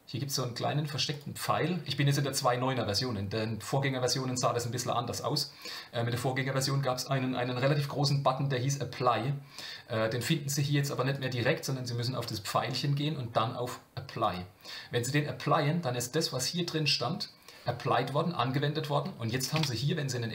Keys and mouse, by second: 1.2-10.9 drag, 12.3-14.3 drag, 19.5 Tab, 20.1 middle click.